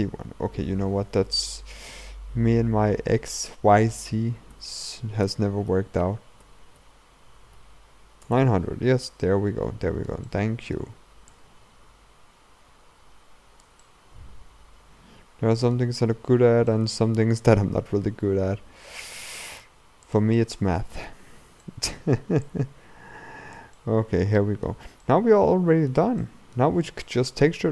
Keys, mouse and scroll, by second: 0.1-1.0 scroll up 2, 1.0-2.6 scroll up 1, 2.6-3.2 scroll up 1, 4.6 r, 9.3-11.3 middle drag, 11.3-13.9 drag, 13.9-16.4 middle drag, 16.4-16.7 scroll up 2, 16.7-17.9 middle drag, 17.9 r, 20.4-22.5 middle drag, 22.5-23.8 drag, 23.8-26.7 middle drag, 26.7-27.1 scroll down 2, 27.1-27.7 middle drag.